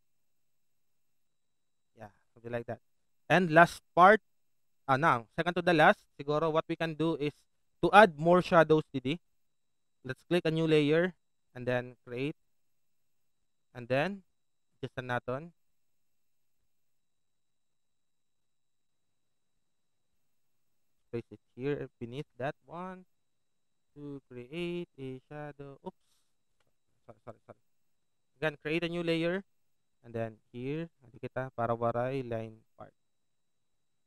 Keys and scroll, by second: 3.8 alt+space, 4.9 alt+s, 33.3 ctrl+z, 33.8 a.